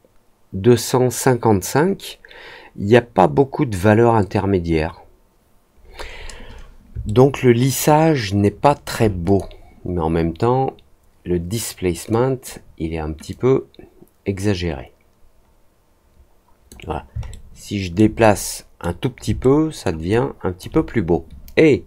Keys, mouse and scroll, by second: 7.0-8.8 alt+middle drag, 9.2 click, 12.0 click, 13.2-16.6 drag, 17.2 alt+middle click, 18.1 middle click, 19.3 alt+middle click, 20.4 alt+click.